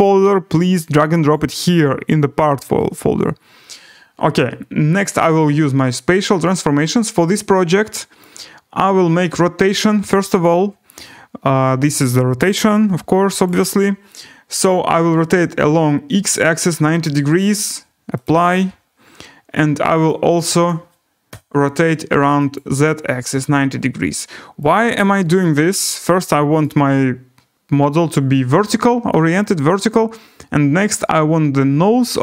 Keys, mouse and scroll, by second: 1.3 click, 5.0 click, 8.2 click, 10.4 click, 13.4 click, 15.9-16.7 typing, 18.2 click, 20.0 click, 20.6 click, 21.0-21.8 typing, 22.5 click, 22.9-23.6 typing, 24.7 click, 25.4 scroll, 26.6 right click, 28.5 scroll, 29.2-29.7 scroll.